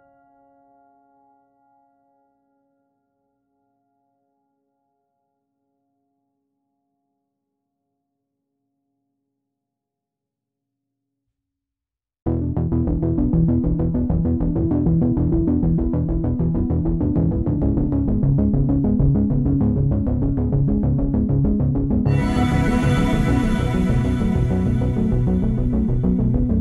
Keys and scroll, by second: 5.4 space, 24.8 space.